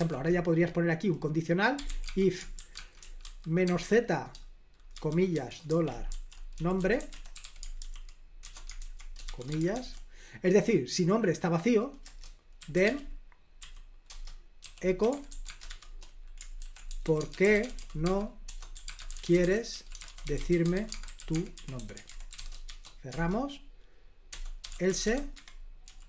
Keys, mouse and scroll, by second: 0.0 typing, 1.5-3.7 typing, 5.0-9.7 typing, 12.0 Return, 12.4-23.1 typing, 14.1 Return, 24.3-25.8 typing.